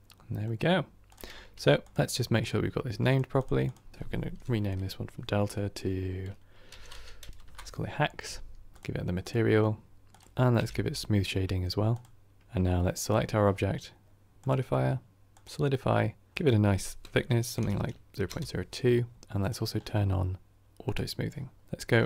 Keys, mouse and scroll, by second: 2.3-3.4 drag, 7.4 click, 9.2-12.0 drag, 15.3-20.8 drag.